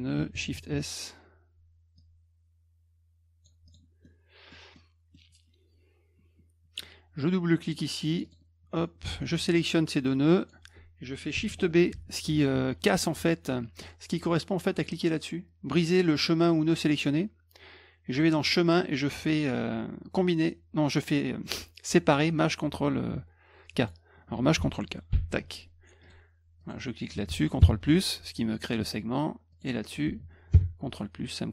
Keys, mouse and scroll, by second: 0.4 shift+s, 2.0-3.4 drag, 3.7 click, 4.0 middle click, 4.7 middle click, 8.1 click, 8.2 click, 9.5 shift+click, 10.3 shift+click, 11.3 shift+Caps_Lock, 11.9 shift+b, 18.4 click, 23.8 click, 25.1 ctrl+shift+k, 26.0 click, 26.6 click, 29.5 click.